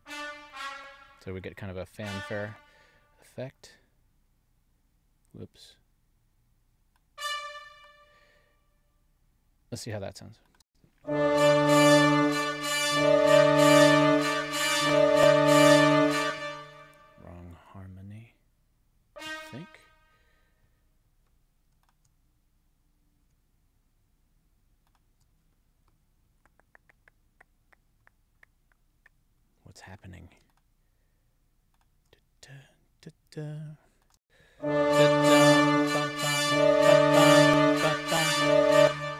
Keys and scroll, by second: 10.5 space, 16.1 space, 34.1 space, 38.6 space.